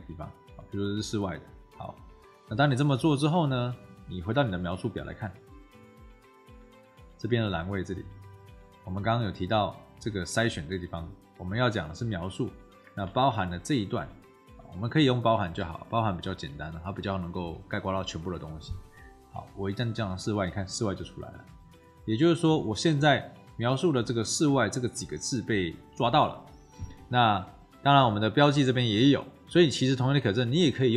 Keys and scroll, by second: 13.1 ctrl+v, 15.7 =, 16.1 BackSpace, 17.6 BackSpace.